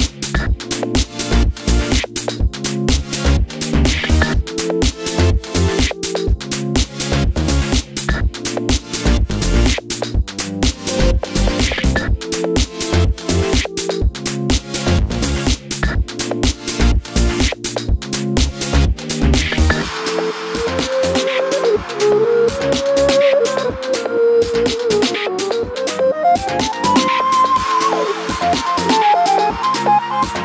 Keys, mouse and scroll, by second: 0.2 click, 0.4 1, 0.5 click, 0.7 g, 1.5 click, 1.7 click, 1.7 g, 2.5 click, 4.2-6.0 shift+middle drag, 4.6-5.1 scroll up 2, 5.1 ctrl+r, 6.2 scroll down 1, 6.3 2, 6.3 click, 7.2 s, 7.6 KP_Enter, 7.9 g, 8.9 click, 9.2 ctrl+r, 14.1 click, 15.1 e, 16.2 1, 16.4 click, 16.7 g, 17.5 click, 17.6 g, 18.6 ctrl+r, 19.2 Escape, 19.5 click, 19.6 g, 20.5 click, 21.0 ctrl+r, 21.8 click, 22.1 g, 22.7 click, 23.2 s, 23.5 KP_Enter, 23.7 g, 24.8-26.7 drag, 25.7 g, 27.1-30.4 shift+middle drag, 27.3 scroll down 2, 27.5-27.9 scroll up 2, 27.9 Tab, 28.7 z, 29.5 KP_7, 29.9 z.